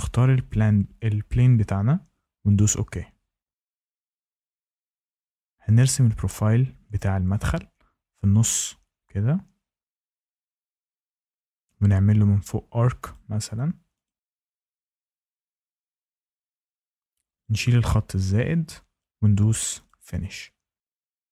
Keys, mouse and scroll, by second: 0.5 click, 2.5 click, 5.3 click, 7.4 click, 10.6 click, 11.8 click, 13.1 click, 14.0 click, 15.8 click, 16.6 Escape, 16.9 Escape, 17.4 click, 18.2 Delete, 19.8 click.